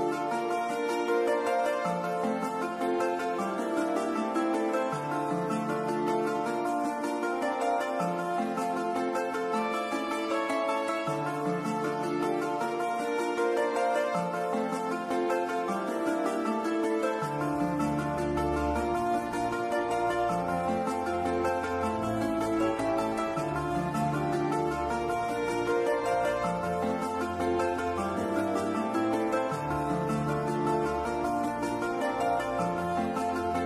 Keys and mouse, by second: 1.9-5.0 drag, 8.2 click, 8.7-9.9 middle drag, 10.4 KP_7, 12.9-17.1 drag, 18.0 shift+click, 19.6 shift+click, 22.2 click, 24.2-25.4 drag, 26.1 click, 29.4 click, 30.0 click, 31.7 click, 31.8-33.6 drag.